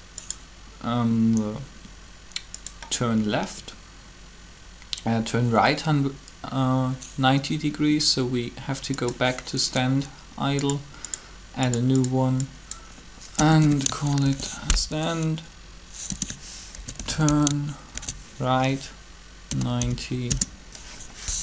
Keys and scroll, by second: 13.3 BackSpace, 13.4 BackSpace, 14.0 shift+r, 16.1-17.9 typing, 19.4-19.8 typing, 20.1 Return.